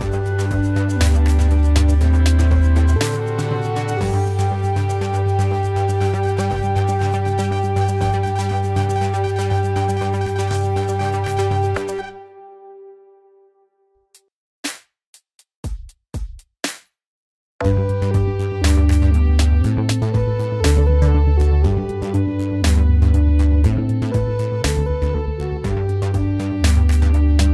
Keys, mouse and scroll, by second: 2.0 Delete.